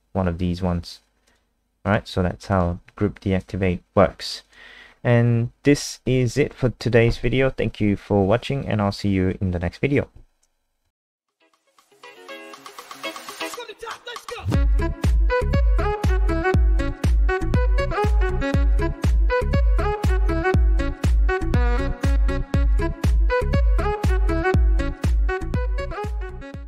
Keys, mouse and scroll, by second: 1.2 click, 4.0-4.5 scroll down 1, 4.5 click, 4.9 scroll up 2, 5.9 click.